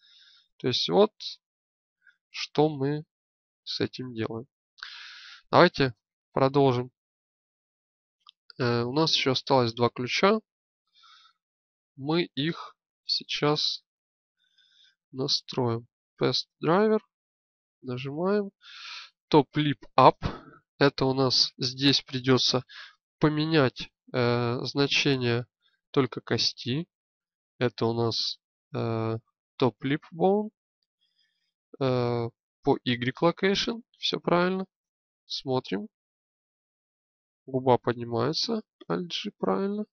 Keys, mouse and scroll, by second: 5.6 shift+space, 34.4 shift+space, 35.2-37.6 drag, 38.5 alt+g.